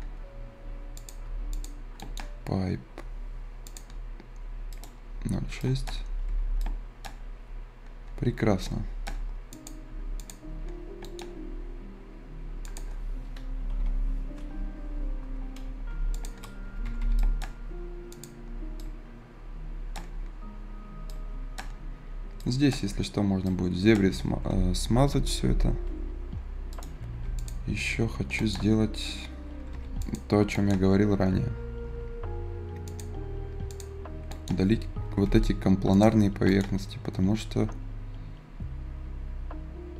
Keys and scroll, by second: 6.0 Escape, 13.6 Return, 13.7 Return, 16.5 Escape, 24.4 Escape, 25.3 ctrl+alt+s, 27.1 Escape, 29.7 Escape, 34.9 Escape.